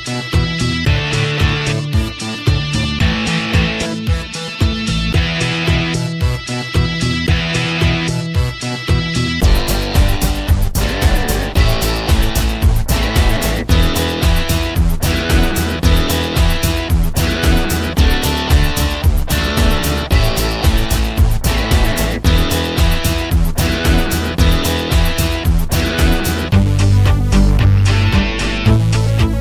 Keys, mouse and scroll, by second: 3.1 alt+middle click, 3.3-4.1 alt+drag, 4.4 Tab, 5.2 alt+middle click, 5.3 alt+right click, 5.8-8.5 shift+drag, 8.5 f, 8.8-10.3 shift+drag, 10.3 alt+middle click, 10.5 alt+click, 10.9 f, 11.0 click, 11.5 right click, 11.8 click, 12.0-13.6 typing, 12.1 click, 12.9 click, 13.4 click, 13.8 shift+click, 14.6 alt+right click, 14.9-16.0 alt+drag, 16.0 alt+middle click, 16.2-17.2 alt+drag, 17.2 Tab, 17.5 alt+right click, 17.8 alt+middle click, 17.9 alt+right click, 18.0-19.7 shift+drag, 19.7 alt+right click, 20.0 f, 20.5 ctrl+click, 21.2 f, 21.4 f, 21.8 shift+click, 22.4 alt+right click, 22.6 alt+shift+click, 23.4 f, 23.5 ctrl+click, 24.4 alt+right click, 24.6 alt+click, 25.2 Tab, 25.8-26.2 scroll up 2, 26.2 click, 26.6 middle click, 27.1-29.4 drag.